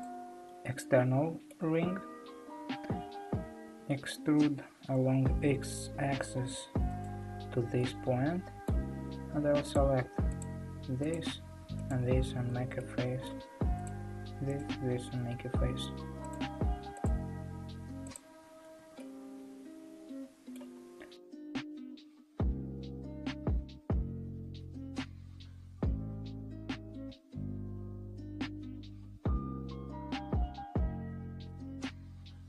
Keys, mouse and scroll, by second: 0.8-2.0 middle drag, 2.0-3.2 scroll down 1, 3.7 e, 7.8-9.7 middle drag, 9.7 click, 10.6 shift+click, 11.1 shift+click, 11.9 shift+click, 12.5 f, 12.8-13.9 middle drag, 13.9 click, 15.2 f, 16.3 click, 17.2 ctrl+click, 18.6 shift+click, 18.8 f, 19.0-21.4 middle drag, 21.4 click, 22.6 ctrl+click, 22.7 f, 22.9-25.4 middle drag, 25.4 click, 26.4 ctrl+click, 27.4 shift+click, 28.1 f, 28.4-29.2 middle drag, 29.2 click, 30.6 shift+click, 31.0 f, 31.9 click.